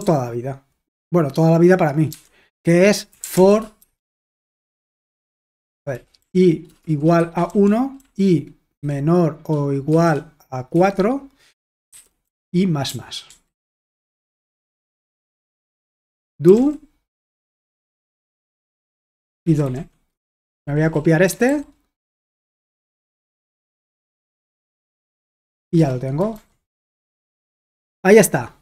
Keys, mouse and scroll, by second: 0.0 typing, 2.1 typing, 3.1-4.1 typing, 5.2-8.8 typing, 9.9-10.8 typing, 11.9-21.5 typing, 15.7 Return, 17.1 Return, 18.4 Return, 22.9-26.1 typing, 26.4 super+h, 26.9 ctrl+p, 27.5 Return.